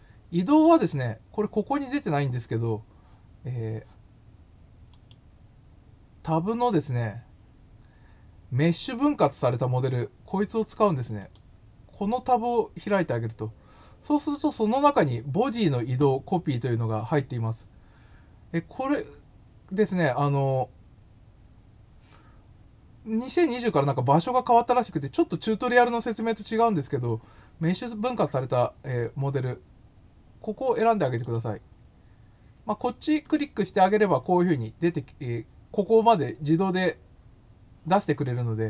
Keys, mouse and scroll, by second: 3.4 scroll up 2, 4.9 right click, 11.1 click, 12.8 click, 31.1 click, 33.2 click.